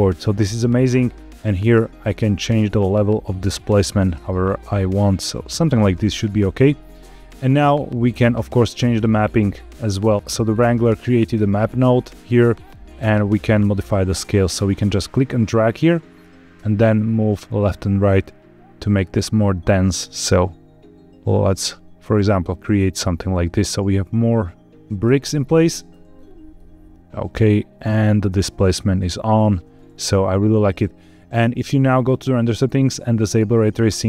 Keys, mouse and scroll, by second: 0.0 shift+click, 0.2-5.4 shift+drag, 5.8-6.3 scroll down 2, 6.3-6.8 middle drag, 7.9 middle click, 8.4-8.8 scroll down 4, 9.2 middle click, 10.1 scroll down 1, 10.2 scroll down 1, 10.7 scroll up 2, 11.3 middle click, 15.0-24.8 drag, 25.6 middle click, 26.1 scroll up 2, 26.5-28.4 middle drag, 28.4 scroll down 2, 29.1-29.5 shift+middle drag, 29.8 scroll up 2, 31.9 click, 33.3 click.